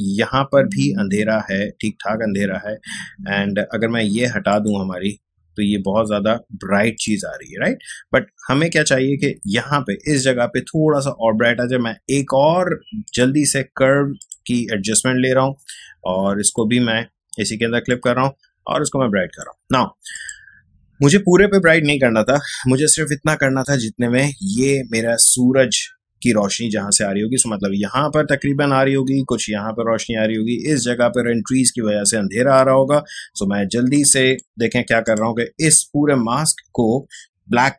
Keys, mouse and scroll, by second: 4.5 click, 6.9 click, 13.0 click, 16.5-21.7 alt+drag, 28.2 space, 33.9 click.